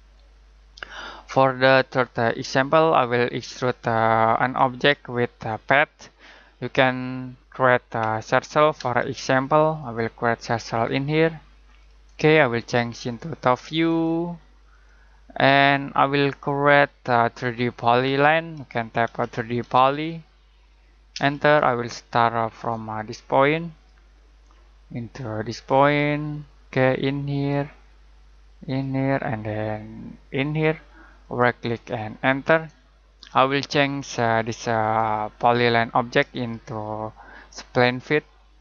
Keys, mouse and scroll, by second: 0.1 middle click, 4.3 middle click, 8.0 middle click, 8.8 space, 9.8 click, 16.3 middle click, 16.8-17.3 scroll down 1, 17.3 middle click, 18.5-19.9 typing, 21.1 space, 21.7 middle click, 23.7 click, 24.1 scroll down 1, 24.4 middle click, 25.8 click, 31.2 right click, 32.0 click, 32.9 middle click, 34.4 click, 35.3-36.3 scroll up 1, 36.3 right click.